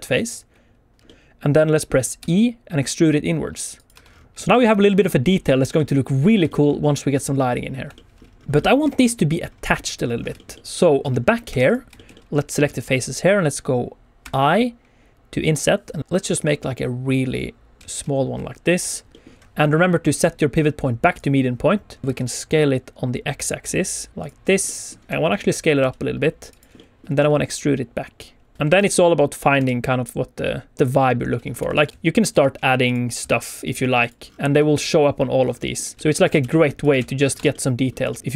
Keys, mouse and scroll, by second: 0.9 click, 1.0 middle click, 2.2 e, 3.7 click, 3.9 Tab, 4.0-4.3 scroll down 3, 4.4 shift+middle click, 4.5 shift+middle click, 4.5 scroll up 2, 4.6 shift+middle click, 5.7 middle click, 6.4 shift+middle click, 6.8-7.3 scroll up 1, 7.9 shift+middle click, 8.2 scroll down 3, 8.4 shift+middle click, 8.4 click, 8.6 middle click, 8.8 alt+a, 9.1 scroll up 1, 9.4-9.9 scroll down 2, 9.9 click, 10.1 scroll up 2, 10.4 shift+middle click, 10.5 middle click, 10.7 scroll down 2, 11.0 Tab, 11.2 scroll up 1, 11.5 3, 11.6 click, 11.9 shift+middle click, 12.1 middle click, 14.2 i, 17.8 click, 17.8 middle click, 17.8 q, 18.3 q, 19.1 middle click, 20.0 click, 22.0 s, 22.1 x, 24.2 click, 24.4 scroll down 1, 24.6 middle click, 24.9 scroll up 1, 25.0 q, 25.3 middle click, 25.7 s, 26.4 click, 26.7 middle click, 27.1 e, 28.5 click, 28.7 i, 29.3 click, 29.5 e, 30.7 click, 30.7 middle click, 31.5-33.7 typing, 31.7 click, 31.9 click, 31.9 shift+middle click, 31.9 scroll up 1, 33.4 click, 34.0 click, 34.2-34.5 scroll down 2, 34.5 middle click, 35.4 scroll up 2, 35.6 middle click, 35.9 middle click, 35.9 g, 36.2 click, 36.4 shift+d, 36.5 middle click, 36.8 click, 36.9 shift+r, 37.1 scroll down 2, 37.3 Tab, 37.5 middle click, 38.1 shift+middle click.